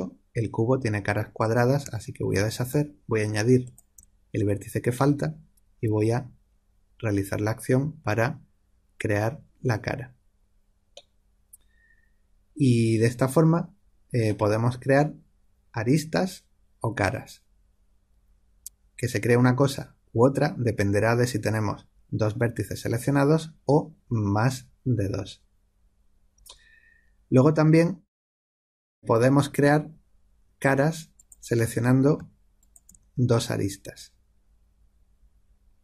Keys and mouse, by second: 2.2 ctrl+z, 3.6 click, 5.8 f, 10.9-28.4 middle drag, 29.3 click, 31.1-34.3 drag.